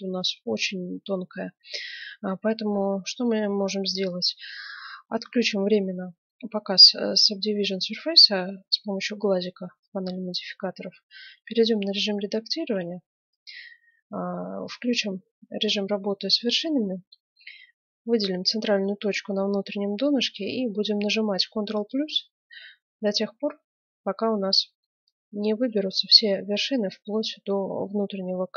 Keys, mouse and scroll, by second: 2.3-4.2 middle drag, 8.6-10.6 drag, 10.6 Tab, 11.7-13.4 middle drag, 12.6 ctrl+Tab, 16.3-18.2 right drag, 21.8 ctrl+KP_Add.